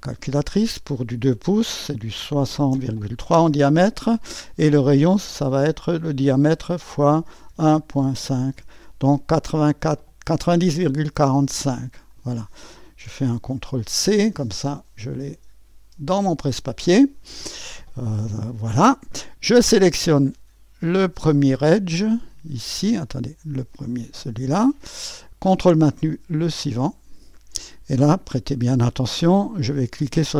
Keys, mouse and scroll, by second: 2.1-3.7 typing, 6.9 *, 7.5 KP_1, 7.9 ., 8.2 5, 8.5 Return, 11.2-14.0 drag, 14.0 ctrl+c, 16.1-19.2 drag, 20.3 click, 24.0 click, 26.8 click.